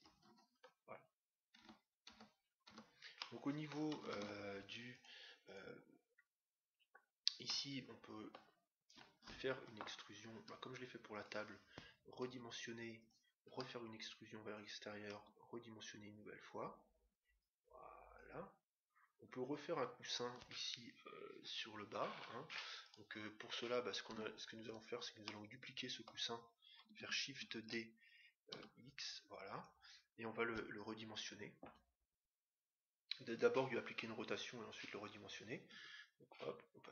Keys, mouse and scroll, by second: 0.5-2.5 middle drag, 1.5 Tab, 2.0 Tab, 2.7 Tab, 3.1-4.8 middle drag, 4.1 ctrl+Tab, 5.4-7.1 right drag, 7.5-9.3 middle drag, 10.3 e, 12.3 s, 13.5 e, 15.1 s, 17.4-19.1 drag, 20.2-22.1 middle drag, 22.8-24.4 right drag, 24.1 Tab, 24.6-26.2 right drag, 25.3-26.9 middle drag, 25.6 click, 27.3 shift+d, 35.6 KP_1.